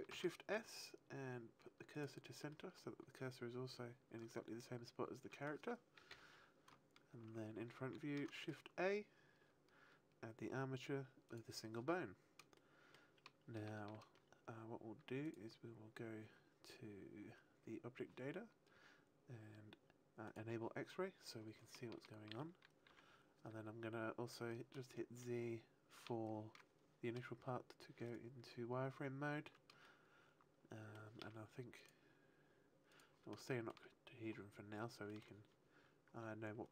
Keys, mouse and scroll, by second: 0.0 shift+s, 2.4 middle click, 4.2 middle click, 6.0 KP_1, 7.8 shift+a, 12.5 shift+middle click, 15.2 click, 15.2-15.7 scroll up 4, 20.2 click, 21.7 shift+middle click, 22.8 z, 24.9 shift+middle click, 28.0 right click, 28.9-29.5 scroll up 2, 29.8 shift+middle click, 31.7 click, 32.8 click, 33.4 shift+middle click, 35.6 shift+middle click.